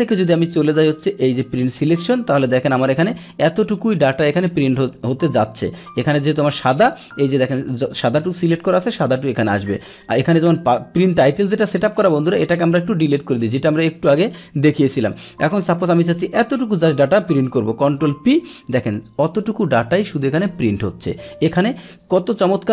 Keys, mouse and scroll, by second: 0.4 click, 1.7 click, 6.2 click, 6.9 Escape, 7.6 click, 11.1 click, 12.3 click, 14.2 Delete, 14.6 click, 15.1 click, 15.7-16.8 drag, 18.0 ctrl+p, 22.2 Escape.